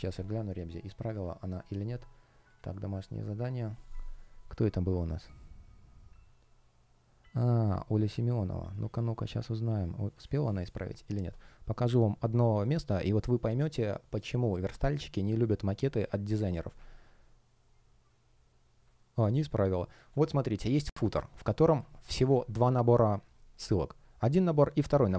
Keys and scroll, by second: 20.7 space, 22.6 F1.